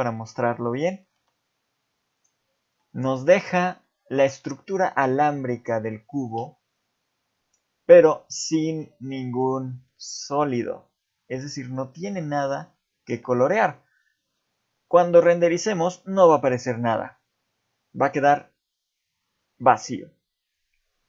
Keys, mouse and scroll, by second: 0.1 middle click, 0.9 middle click, 1.2 x, 2.8 middle click, 3.8 middle click, 8.6 shift+middle click, 8.9-9.4 scroll up 2, 9.9 middle click, 12.3 shift+middle click, 16.5 click.